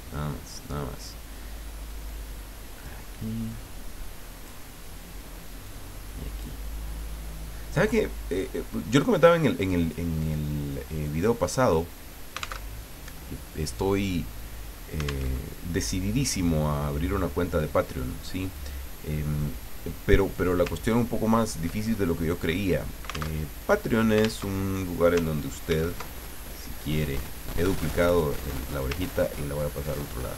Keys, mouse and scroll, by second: 2.1 click, 3.5 click, 5.6 click, 8.4-10.1 drag, 11.0-12.2 drag, 12.7 alt+Tab, 15.2 alt+Tab, 18.5 click, 19.4 click, 20.8-21.2 ctrl+scroll down 2, 21.8 ctrl+middle click, 23.4 alt+Tab, 24.4 alt+Tab, 25.7 ctrl+d, 28.1 click, 29.1-30.3 ctrl+drag.